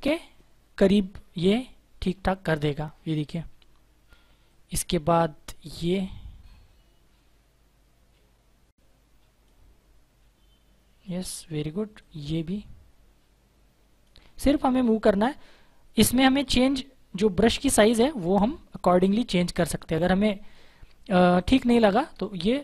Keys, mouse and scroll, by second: 4.3 click, 4.3 space, 5.8 click, 11.8 click, 17.0 click, 21.0 space, 21.2 click, 21.5 space.